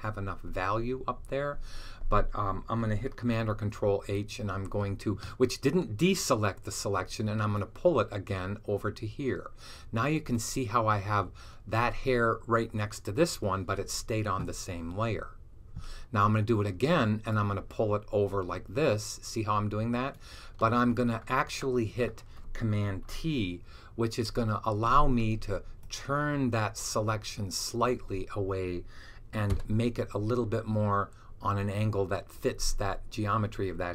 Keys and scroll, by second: 3.1 super+h, 24.1 super+t.